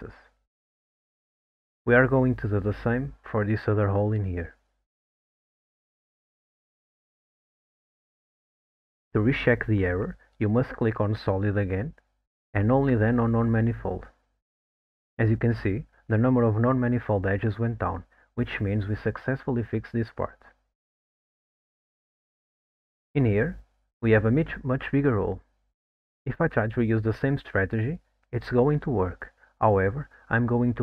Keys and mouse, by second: 4.9 alt+click, 5.9 f, 6.7 ctrl+t, 8.1 click, 9.7 middle drag, 14.5 click, 15.9 click, 22.3 middle click, 24.1 alt+middle click, 24.6-25.0 middle drag, 25.9-26.2 middle drag, 26.6 alt+middle click, 27.2 middle drag, 27.8 alt+middle click, 28.3 middle click, 29.6 alt+middle click.